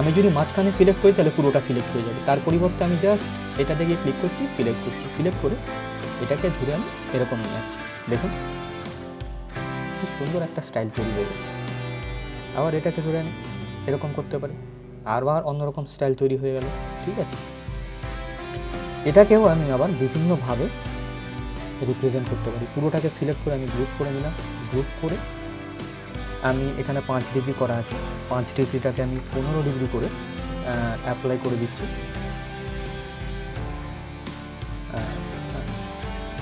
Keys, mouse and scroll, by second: 8.5 click, 9.0-9.6 scroll down 1, 9.7 scroll up 1, 11.1-14.8 drag, 14.8-15.3 scroll down 1, 15.3 click, 15.9 scroll up 1, 18.4 scroll down 1, 19.2-20.0 scroll up 1, 20.0-23.1 drag, 23.1 ctrl+g, 23.6 click, 27.8 click, 30.8 click, 35.6-36.2 scroll down 1, 36.2-36.4 drag.